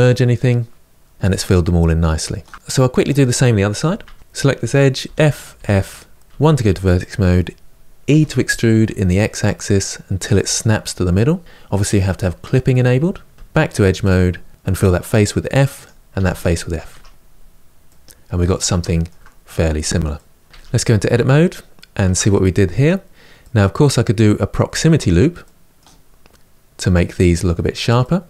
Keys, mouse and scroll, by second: 3.5 Tab, 3.7 click, 4.8 f, 5.3 f, 5.9 middle click, 6.2 1, 6.8 click, 7.8 e, 13.3 2, 13.8 click, 14.5 f, 15.6 click, 15.9 f, 16.7 Tab, 17.0-17.6 scroll down 6, 17.6-19.1 middle drag, 19.1-19.8 scroll up 2, 19.8 middle click, 20.4 Tab, 21.0-25.9 shift+middle drag, 25.9-26.9 scroll up 1, 27.8-28.2 middle drag.